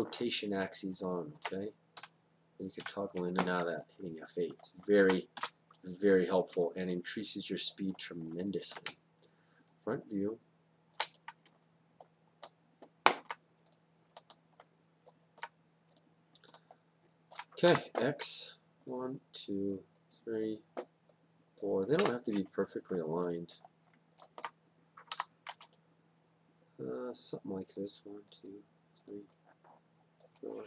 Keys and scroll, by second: 2.9 F8, 5.4 ctrl+s, 9.0 space, 17.7 y, 22.0 Return, 25.2 y.